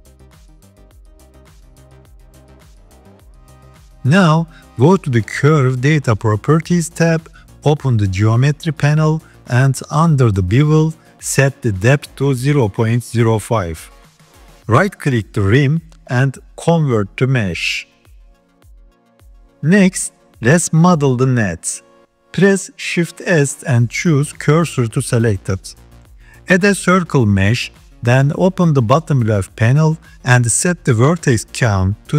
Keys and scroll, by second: 0.3 g, 23.0 shift+s, 26.6 shift+a.